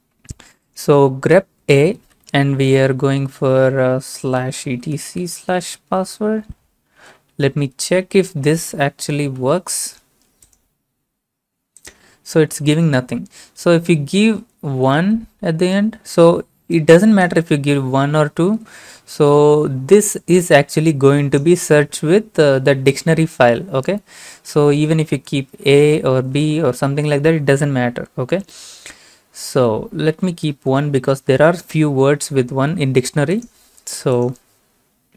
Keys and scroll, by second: 4.4-7.2 typing, 9.2 ctrl+a, 9.4 ctrl+c, 12.2 ctrl+v, 14.5-15.5 typing, 18.2-19.7 typing, 25.5 typing, 28.3 BackSpace, 29.9-30.8 typing, 32.3 ctrl+a, 32.7 ctrl+c.